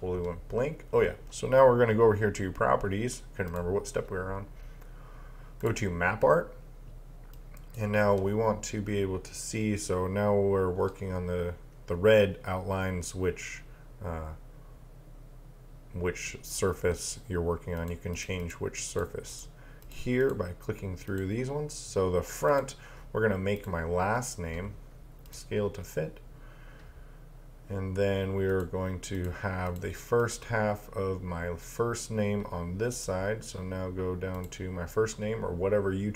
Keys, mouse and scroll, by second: 3.5 click, 17.8 click, 28.5 click, 33.0 click.